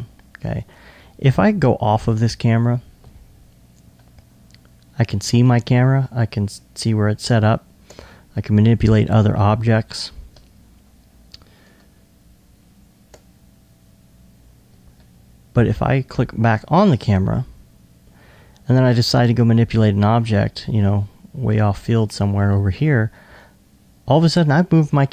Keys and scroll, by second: 10.3 2.